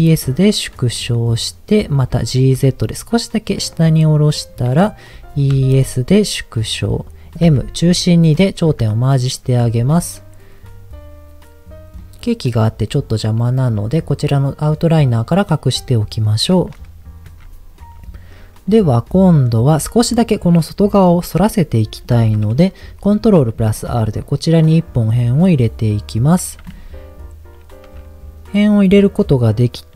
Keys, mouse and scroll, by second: 0.8 click, 1.1 middle click, 2.1 g, 2.3 z, 4.3 click, 5.1 e, 5.5 s, 6.6 click, 7.4 m, 8.3-9.3 middle drag, 9.4 Tab, 12.2 middle click, 14.9 click, 15.7 middle click, 17.2 Tab, 18.9 middle click, 22.0 middle click, 23.1 ctrl+r, 24.6-25.7 right drag.